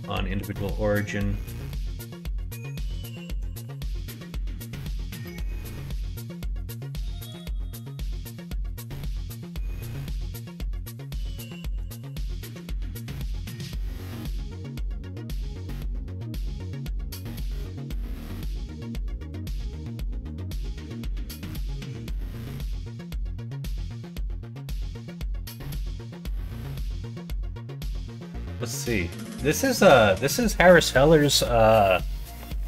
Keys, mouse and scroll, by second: 0.3 s, 3.6 alt+z, 4.2 middle click, 5.0 s, 7.4 middle click, 7.5 click, 8.2 middle click, 8.9 g, 12.5 g, 15.2 g, 23.0 middle click, 23.1 click, 23.6 middle click, 23.6 right click.